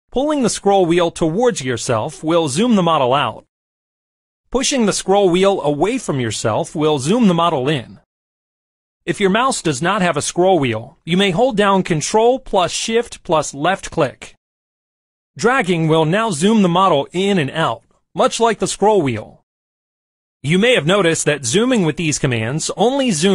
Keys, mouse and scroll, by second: 1.3-2.6 scroll down 2, 1.7 middle click, 2.6-3.5 scroll down 1, 3.5-4.0 scroll down 1, 4.0-5.6 scroll up 2, 4.7-7.6 middle drag, 5.6-6.6 scroll up 1, 6.6-7.3 scroll up 1, 7.3-8.1 scroll up 1, 8.1-8.6 scroll up 1, 8.6-9.5 scroll down 2, 9.5 scroll down 1, 11.7 ctrl+shift+click, 14.3-16.3 ctrl+shift+drag, 17.1-19.3 ctrl+shift+drag, 19.9-21.9 ctrl+shift+drag, 22.8 middle click.